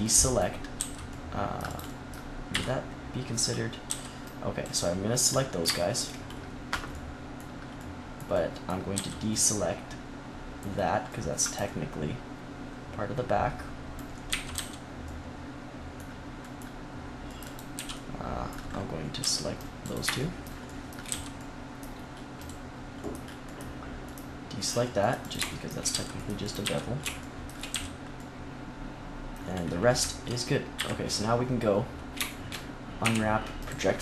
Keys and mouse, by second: 0.7 c, 2.4 KP_3, 3.8 c, 5.1 click, 6.3 middle click, 8.8 c, 14.2 z, 14.4 c, 17.5-20.5 drag, 17.7 z, 19.1 c, 20.5-23.6 middle drag, 21.0 c, 25.2 right click, 25.3 middle click, 25.8 c, 26.5 z, 27.6 z, 29.3-30.7 middle drag, 30.7 KP_3, 32.9 u.